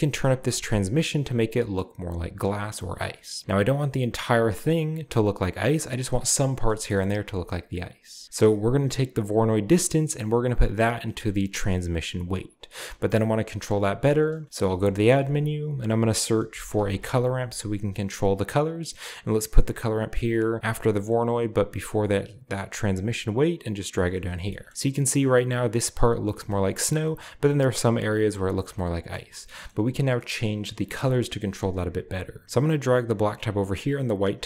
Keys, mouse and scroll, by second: 2.8 middle click, 3.1-4.5 scroll down 1, 4.5-5.6 drag, 5.6 middle drag, 7.6 scroll down 2, 9.6-12.1 drag, 12.5-14.4 drag, 14.4-15.1 shift+middle drag, 14.9 shift+a, 15.1-16.1 shift+drag, 16.5-16.9 typing, 18.4 click, 21.1 click, 21.7 click, 22.8-24.7 drag, 24.5 shift+middle drag, 26.5-27.8 shift+middle drag, 28.3-29.2 scroll down 2, 29.2 shift+middle click, 29.7 middle click, 29.7-31.0 scroll up 2, 30.4 middle click, 31.1 middle click, 31.1-32.4 scroll up 2, 32.4-33.6 drag, 33.8-34.4 drag.